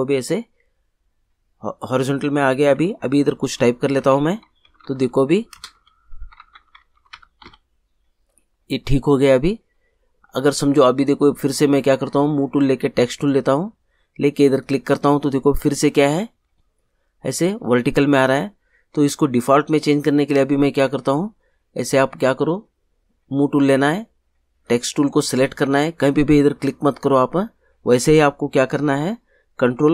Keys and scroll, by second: 3.9-7.9 typing.